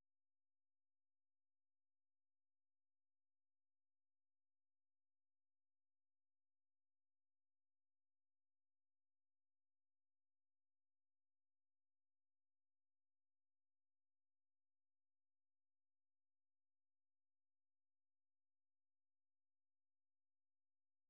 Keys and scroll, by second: 0.0-11.0 typing, 14.2 space, 17.7 Escape, 18.2-20.9 typing.